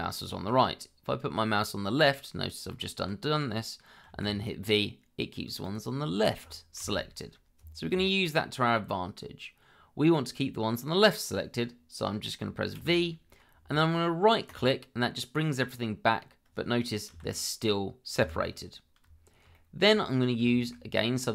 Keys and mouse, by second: 4.1 v, 5.6 click, 6.8 ctrl+z, 12.7 v, 17.1 g, 18.2 Escape, 19.5 shift+middle click, 20.5 shift+middle click.